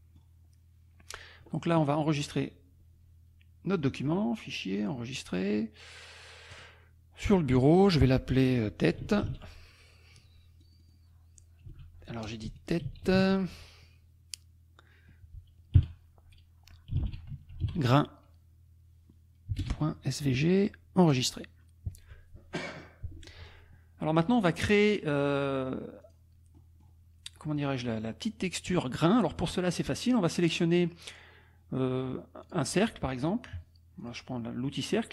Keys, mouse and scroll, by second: 0.4-1.3 scroll down 1, 3.8 click, 4.8 click, 6.6 click, 9.0 t, 10.6 click, 11.7 r, 12.6 BackSpace, 12.9 e, 16.7-18.1 typing, 19.6 shift+;, 21.1 click, 26.2 click, 32.4 click, 34.0 click.